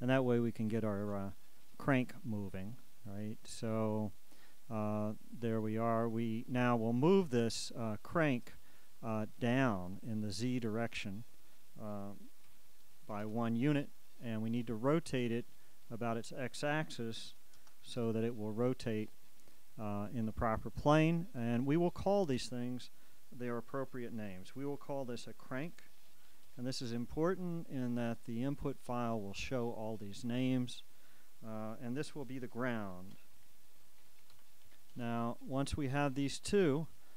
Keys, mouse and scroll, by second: 1.6-10.0 drag, 11.1 shift+click, 12.6 -, 13.1 1, 13.4 Return, 15.9 shift+click, 17.4 KP_9, 17.7 KP_0, 18.1 KP_Enter, 22.2 shift+click, 25.6-26.6 typing, 29.6 click, 30.3 click, 33.1-34.5 typing, 35.0 Return, 37.0 click.